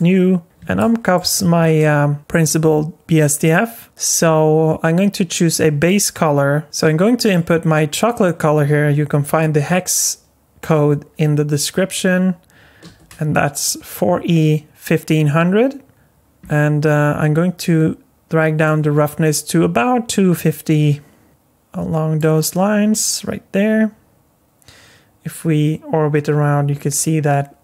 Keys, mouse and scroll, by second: 0.4 scroll up 1, 0.8 shift+middle click, 1.4-1.8 scroll up 4, 1.8 shift+middle click, 5.8 click, 18.6 click, 23.0 middle click.